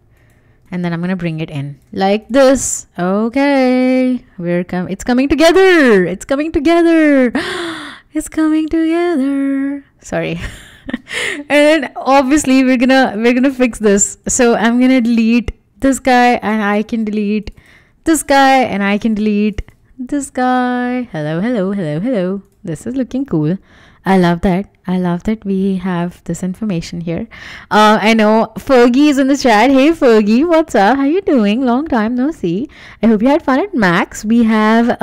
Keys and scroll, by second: 10.9 w, 15.7 BackSpace, 17.8 BackSpace, 20.2 BackSpace, 21.9 Escape.